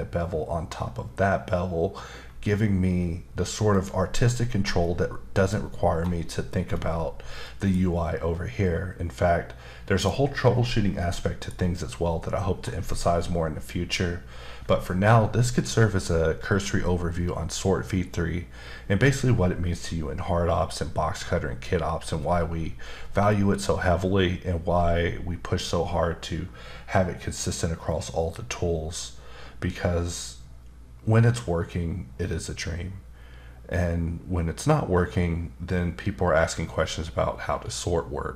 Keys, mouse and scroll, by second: 3.7 click, 4.5-4.8 scroll down 1, 4.8 middle click, 5.9-7.4 scroll down 1, 7.4 middle click, 10.0 click, 11.0 middle click, 12.0-12.5 scroll down 1, 12.5-14.6 scroll up 1.